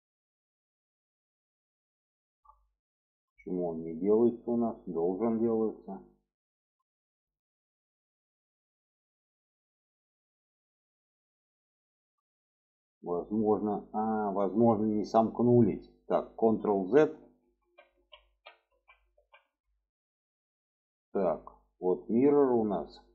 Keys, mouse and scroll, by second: 0.8 shift+middle click, 1.9 alt+shift+click, 2.7 middle click, 3.8 shift+middle click, 4.4 middle click, 5.4 shift+middle click, 5.8 middle click, 6.7 shift+middle click, 8.1 shift+middle click, 9.2 middle click, 10.8 middle click, 11.7 shift+middle click, 12.6 shift+middle click, 14.2 middle click, 15.5 alt+middle click, 16.5 ctrl+z, 19.8 middle click, 21.7-22.1 middle drag.